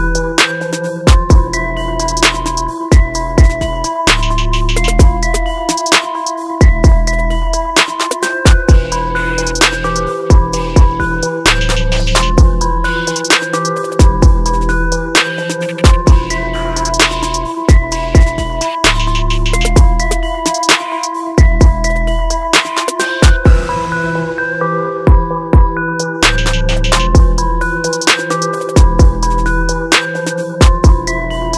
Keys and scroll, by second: 8.6 ctrl+i, 19.1 ctrl+alt+z.